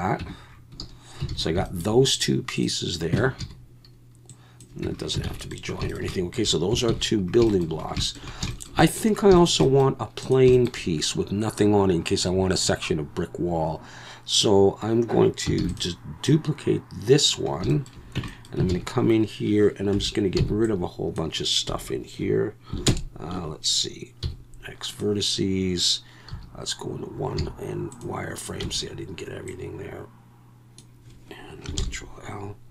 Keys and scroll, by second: 0.2 Tab, 1.3 alt+a, 3.2 Tab, 3.4 a, 4.8 Tab, 5.2 alt+a, 6.9 ctrl+s, 15.6 shift+d, 18.1 Tab, 18.7 alt+a, 19.9 3, 20.5 v, 20.5 c, 21.7 Escape, 22.9 ctrl+KP_Add, 24.2 x, 26.3 1, 27.4 z, 28.6 b, 31.8 ctrl+l.